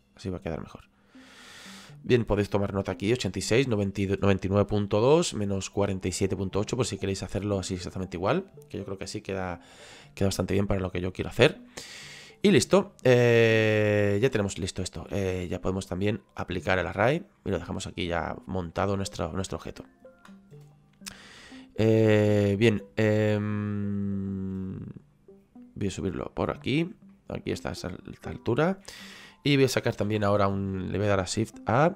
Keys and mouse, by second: 6.5 middle click, 11.7 middle click, 14.2 click, 16.8 click, 21.4 click, 24.6 click, 27.1 middle click.